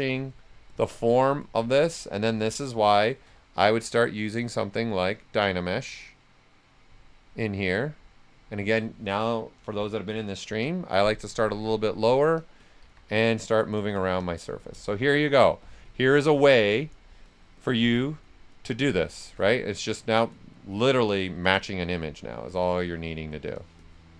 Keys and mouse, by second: 2.3-4.3 shift+drag, 4.3 click, 9.3-10.2 typing, 10.4 Return, 11.2 click, 12.8 s, 12.8 click, 15.8 shift+click, 18.9 shift+click, 20.9 right click, 22.4 s, 22.5 click.